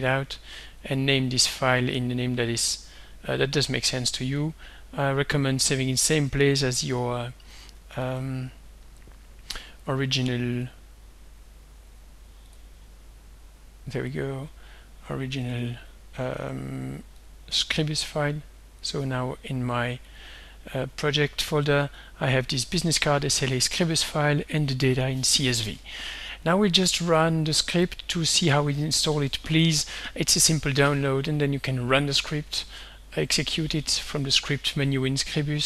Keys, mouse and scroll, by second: 0.8 click, 1.9 click, 4.3 click, 5.9-6.2 scroll down 2, 6.5-6.8 scroll up 2, 6.8 click, 8.1 click, 9.6 click, 10.7 click, 12.0 click, 12.5 click, 14.1 click, 17.2 click, 17.7 click, 18.9 click, 20.1 click, 22.0 click, 24.2 click, 26.5 click, 28.1 click, 35.4 click.